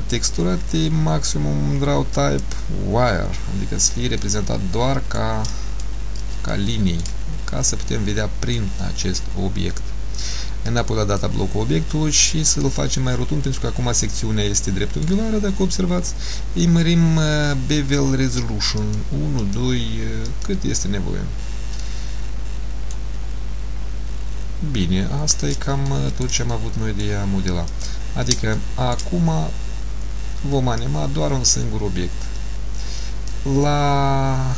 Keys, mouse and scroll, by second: 0.0 click, 4.3 middle click, 6.1-6.4 scroll up 2, 6.6 shift+middle click, 7.5 scroll down 2, 8.0 middle click, 10.8 click, 12.7 middle click, 18.9 click, 19.5 click, 20.3 click, 22.0 middle click, 23.5-23.8 scroll down 1, 25.1-25.5 scroll down 1, 26.0 shift+middle click, 26.7 middle click, 27.9 click, 28.7 shift+middle click, 30.9 click.